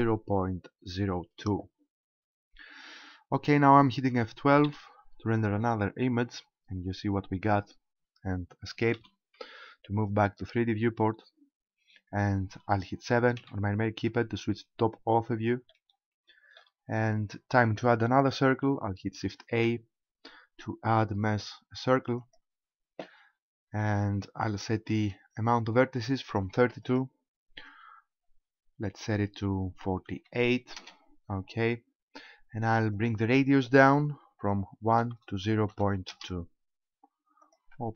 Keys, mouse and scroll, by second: 8.9 Escape, 13.4 KP_7, 15.7 shift+middle click, 16.7-17.3 scroll down 2, 19.5 shift+a, 23.8-24.5 scroll down 3, 26.8 click, 32.9 click, 37.4 click.